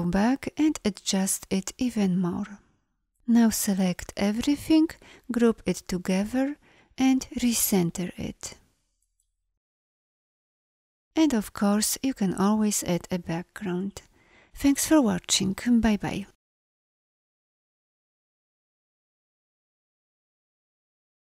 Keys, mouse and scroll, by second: 5.5 ctrl+g.